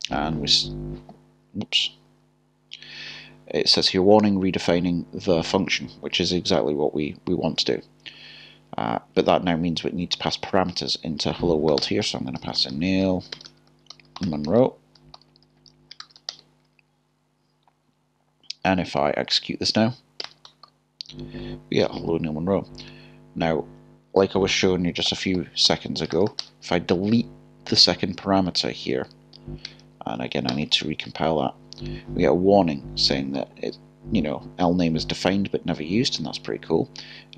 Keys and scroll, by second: 15.0 typing, 30.5 k.